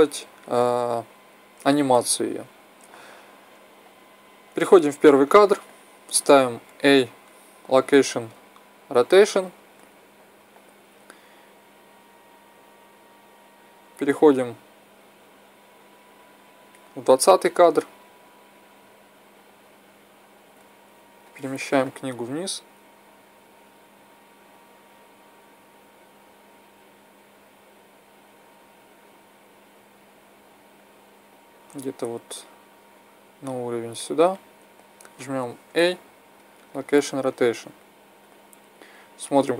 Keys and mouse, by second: 6.6 i, 12.0-13.9 drag, 21.2-22.9 drag, 35.6 i, 38.8-39.5 drag.